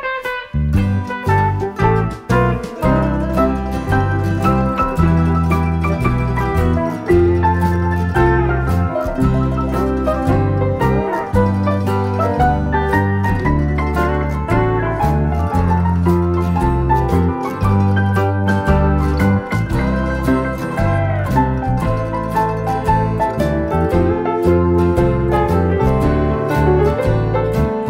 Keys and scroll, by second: 1.8 ctrl+d, 3.6 ctrl+d, 4.3 ctrl+d, 4.9 ctrl+d, 5.4 ctrl+d, 6.0 ctrl+d, 6.6 ctrl+d, 7.1 ctrl+d, 8.7 shift+F6, 11.9 ctrl+d, 12.7 ctrl+d, 13.6 ctrl+d, 14.5 ctrl+d, 21.1 ctrl+d, 23.9 ctrl+d, 25.1 ctrl+*.